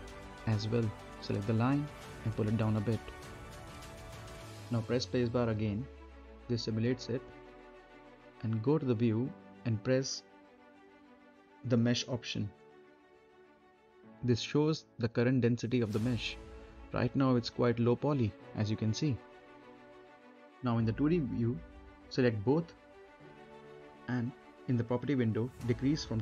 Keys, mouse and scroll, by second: 1.5-3.8 drag, 3.8-4.2 scroll up 1, 4.2 middle click, 4.3-4.9 scroll up 1, 4.9 click, 5.8 space, 6.3 right click, 7.5 space, 8.1-8.6 scroll up 2, 8.6-9.0 scroll down 2, 9.0 middle click, 10.2 scroll up 1, 10.4 middle click, 11.2 scroll down 1, 11.5 middle click, 12.7 click, 14.8 scroll down 1, 15.1 middle click, 15.5-19.8 right drag, 19.8 scroll down 1, 20.1 middle click, 20.7 a, 21.1 click.